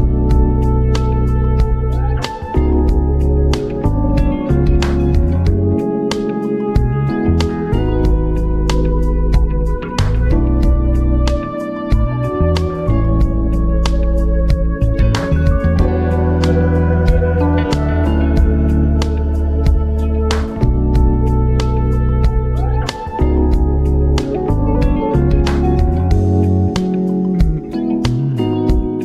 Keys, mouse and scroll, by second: 0.1-16.0 drag, 16.8 v, 17.1 Up, 18.6 v, 18.8 Up, 21.3 v, 22.3 shift+Up, 23.4 ctrl+z, 23.5 ctrl+scroll up 1, 24.3 ctrl+click, 25.9 Up, 27.6 Left, 28.1 Up, 28.4 Left.